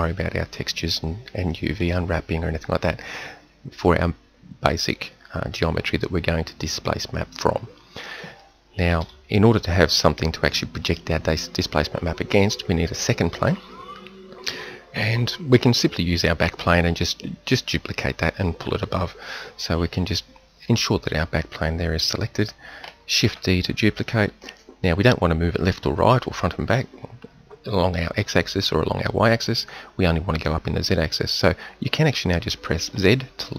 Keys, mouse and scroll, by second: 1.4-9.1 middle drag, 9.1 KP_1, 23.3 shift+d.